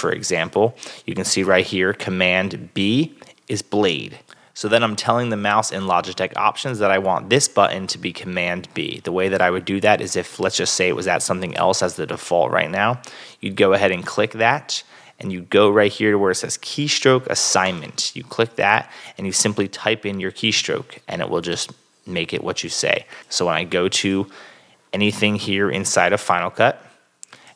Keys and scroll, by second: 20.5 super+b.